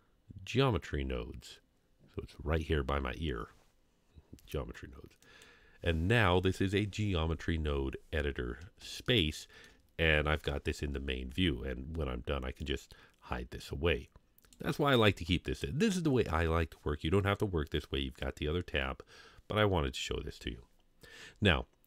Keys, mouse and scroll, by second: 8.0-8.8 scroll down 2, 9.1-9.7 shift+middle drag, 12.6-14.6 drag.